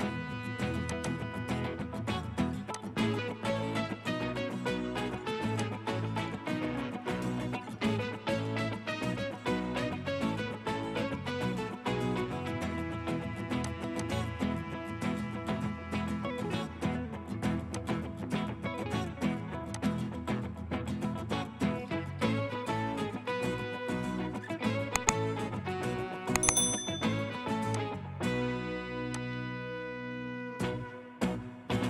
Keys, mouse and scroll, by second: 1.1 double click, 2.2 typing, 14.0 double click, 20.3 middle click, 22.4-22.9 scroll up 1, 23.0 scroll down 1, 23.5 middle click, 24.2-24.8 scroll up 1, 24.8 scroll down 1, 26.1 right click.